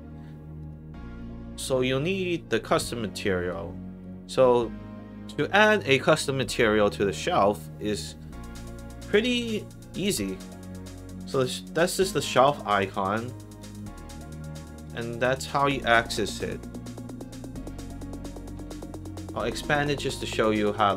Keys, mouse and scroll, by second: 0.0 middle click, 0.5 click, 1.3 middle click, 3.1 click, 3.9 click, 13.6 click, 14.8 click, 19.8 click.